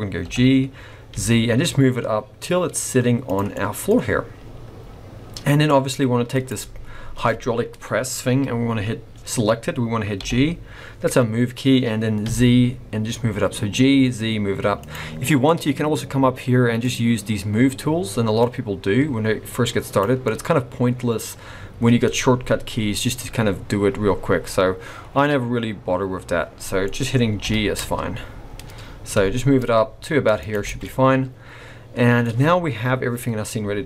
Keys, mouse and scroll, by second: 0.2 g, 3.5 middle click, 3.5 scroll down 1, 4.4-6.2 scroll down 1, 6.2 scroll down 2, 6.3 click, 10.1 g, 16.8 click, 18.3 click, 20.2 middle click, 26.8 middle click, 27.4 g, 30.6 alt+a, 30.8 middle click.